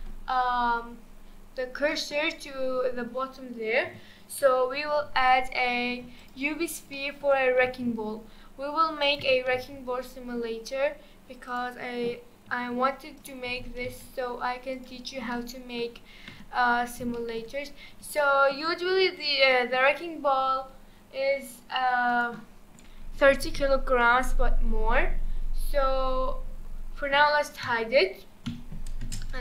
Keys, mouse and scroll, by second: 0.3-1.9 scroll down 1, 1.9-3.8 middle drag, 3.8 KP_1, 4.2-4.9 scroll up 2, 4.9 scroll up 1, 5.0 shift+a, 6.6-6.9 scroll down 2, 6.9-7.2 shift+middle drag, 7.2-7.6 shift+scroll down 1, 7.6 s, 9.6 g, 12.5 s, 13.5 g, 15.1 scroll down 2, 15.3-15.8 middle drag, 15.8 scroll down 1, 16.3 Tab, 16.7-17.1 scroll down 4, 17.1-17.5 shift+middle drag, 17.5-18.2 scroll up 6, 18.2-18.7 shift+middle drag, 18.7-19.5 scroll up 3, 19.5-22.1 shift+middle drag, 22.1-24.6 drag, 24.6-26.0 scroll down 10, 26.4-27.1 scroll up 7, 27.1 scroll down 4, 28.5 h, 29.0 space.